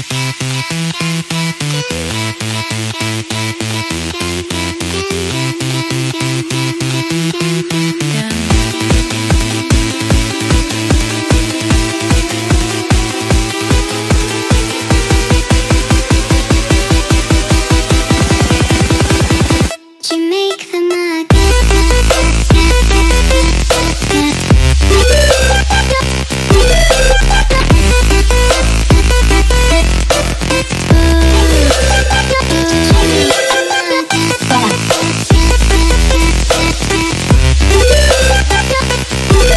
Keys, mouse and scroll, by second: 0.5 click, 1.3 ctrl+t, 3.8 click, 6.2 click, 7.1 click, 9.1 click, 10.0 click, 11.2 click, 11.8 click, 13.3 typing, 14.3-15.6 typing, 16.9 typing, 18.0 typing, 18.5 click, 20.1 click, 20.4 ctrl+t, 24.0-25.2 shift+drag, 26.1 ctrl+space, 26.3 click, 27.1 ctrl+click, 27.3 ctrl+click, 28.0 click, 28.2 ctrl+click, 28.9 click, 29.2 click, 31.1 click, 32.5 ctrl+click, 33.1 click, 34.4 click, 34.6 click, 36.5 ctrl+space, 36.5 click, 36.8 ctrl+click, 37.7 click, 38.9 click.